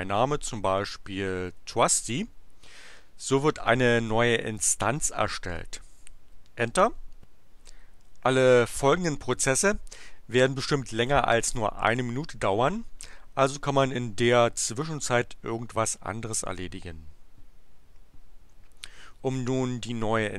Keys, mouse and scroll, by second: 0.5-2.3 typing, 6.7 Return.